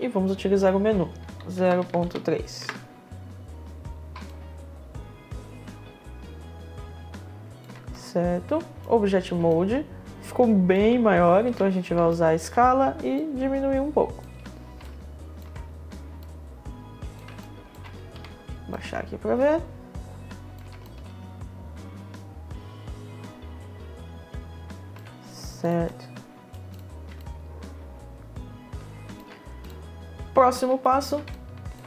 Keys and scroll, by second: 1.3 0, 1.7 3, 2.1 Return, 11.0 r, 18.1 w, 24.5 w.